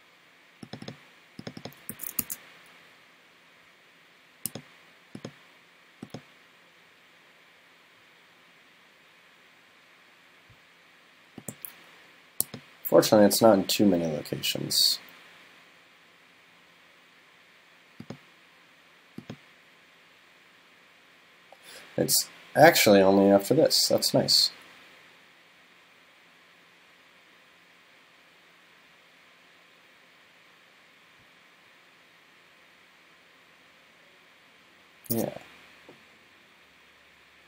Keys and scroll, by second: 1.9 super+c, 2.2 super+f.